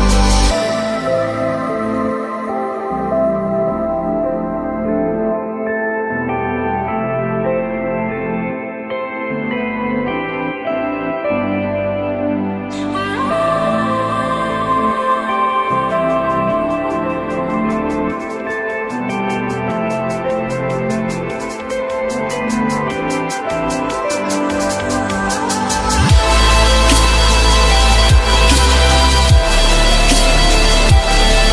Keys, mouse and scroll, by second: 3.9 j, 5.2 shift+click, 6.3 ctrl+click, 6.8 shift+click, 8.5 shift+click, 16.5 4, 16.7 Return, 20.1 F4, 21.2 alt+middle click, 22.2 alt+middle click, 22.2 alt+double middle click, 23.0 F4, 27.8 F4, 28.5 F4, 30.9 ctrl+click.